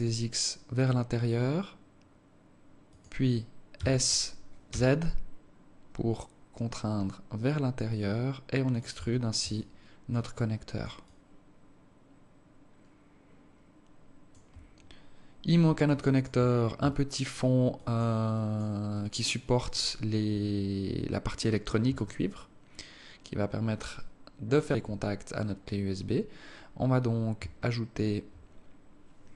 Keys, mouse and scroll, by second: 3.8 s, 9.0 Tab, 9.6 alt+click, 11.2 alt+click, 15.9 alt+click, 17.0 alt+click, 18.0 alt+click, 18.4 alt+click, 19.0 alt+click, 19.5 alt+click, 22.0 alt+click, 28.6 scroll down 6.